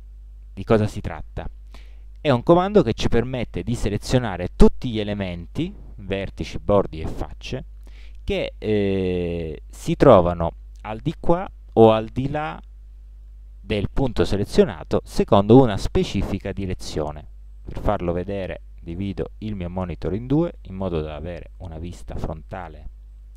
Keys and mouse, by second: 1.7-3.3 middle drag, 3.8-4.3 middle drag, 18.3 click, 19.3 click, 20.6 KP_1.